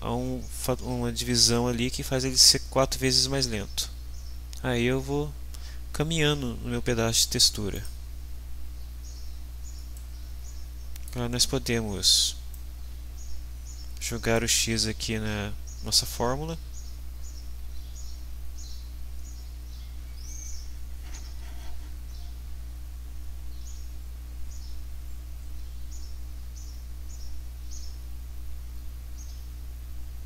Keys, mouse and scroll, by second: 7.8 click, 10.0-11.2 middle drag, 12.5-14.5 drag.